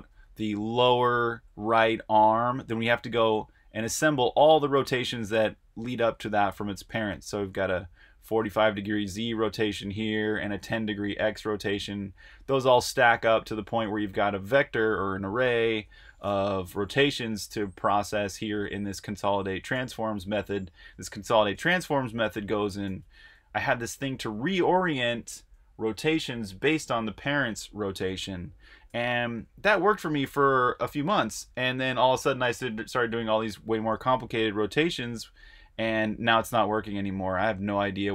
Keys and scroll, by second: 14.0 super+Tab, 16.4-24.3 typing, 34.7-35.4 typing, 37.1-38.1 typing.